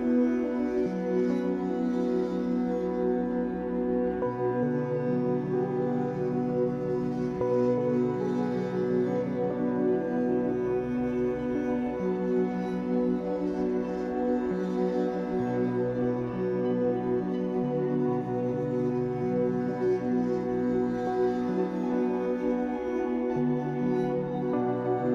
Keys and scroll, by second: 2.9 ctrl+j, 5.8 ctrl+t.